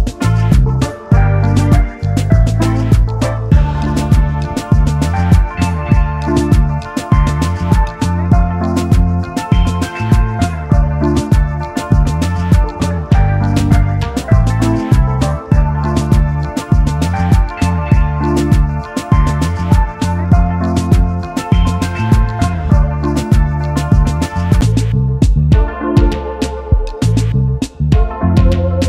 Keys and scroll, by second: 14.9 ctrl+s.